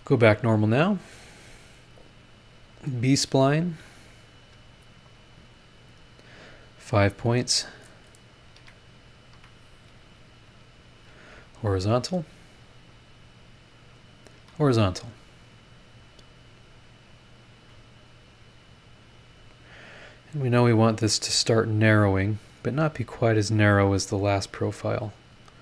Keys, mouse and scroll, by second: 0.7 click, 2.0 click, 2.6 scroll up 1, 3.6 click, 4.4 click, 5.1 click, 5.4 scroll down 1, 5.9-6.2 scroll up 1, 8.2 click, 8.6 Escape, 9.3 Escape, 9.9 click, 10.8 click, 11.2 h, 11.6 scroll down 1, 12.9 click, 14.0 click, 14.4 h, 16.7-17.7 drag, 18.5-21.4 drag, 22.8 click, 24.5-25.6 drag.